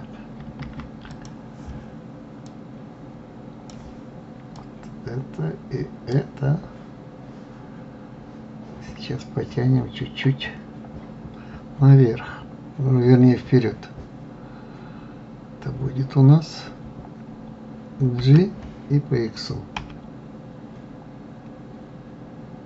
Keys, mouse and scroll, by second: 1.1 ctrl+z, 1.5 click, 2.8-8.0 drag, 18.6 g.